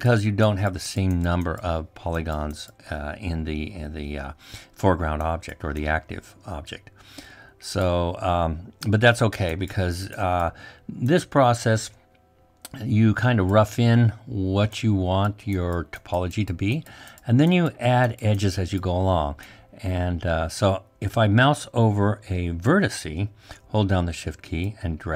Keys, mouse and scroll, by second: 24.9-25.1 shift+drag.